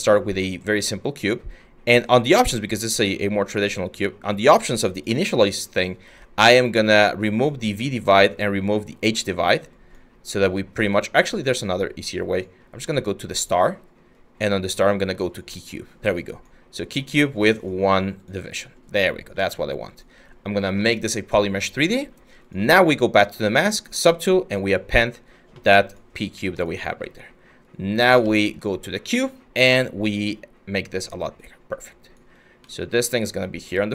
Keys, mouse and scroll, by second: 26.5 w, 27.9 ctrl+z.